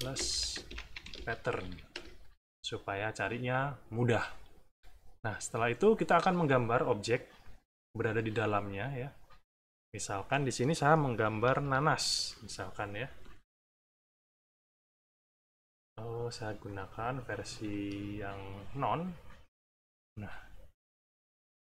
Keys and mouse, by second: 0.0-2.0 typing, 5.5 click, 9.2 click, 10.1 middle click, 11.2 =, 11.7 middle click, 13.2 click, 14.0 click, 14.6 click, 16.6 click, 17.5 Escape, 18.3 click, 19.1-20.9 drag, 21.5-21.6 drag.